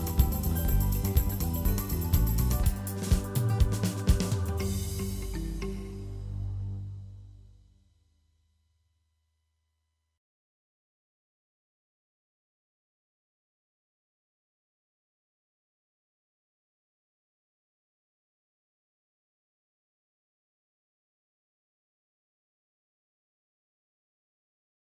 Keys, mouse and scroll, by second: 1.1 Tab, 1.3-2.3 middle drag, 2.4 ctrl+a, 2.7-3.9 middle drag, 3.9 KP_1, 4.2-4.6 shift+middle drag, 4.8-5.1 middle drag, 5.1 click, 5.8 s, 6.5 middle click, 7.2 KP_1, 7.5 ctrl+s, 7.6 shift+middle click, 7.7 Tab, 7.9 alt+z, 8.3 2, 8.4-11.0 drag, 11.8 shift+middle click, 12.4 1, 12.8 alt+z, 13.0 alt+z, 13.1 click, 14.5 3, 15.0 shift+middle click, 15.3 1, 15.6 click, 16.0 2, 16.2 click, 16.6 alt+z, 17.1 g, 19.9 click, 20.3 g, 21.3 middle click, 22.1 click, 22.2 g, 23.9 middle click, 24.6 alt+z, 24.7 middle click.